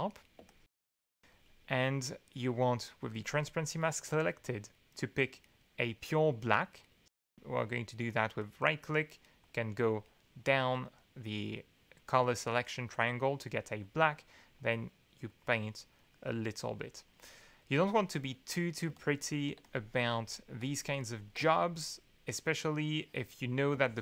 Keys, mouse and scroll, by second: 0.4-1.5 shift+drag, 3.1 click, 7.1 d, 8.4 right click, 9.4-11.1 drag, 12.4 middle click, 13.8 click, 14.6 click, 15.3 click, 16.0 click, 17.1 click, 17.6 click, 17.9 2, 18.9 ctrl+space, 18.9-20.3 ctrl+drag, 20.6 click, 21.1 ctrl+click, 21.6 ctrl+shift+click, 22.3 shift+click, 23.0 shift+click, 23.7 space, 23.8 click.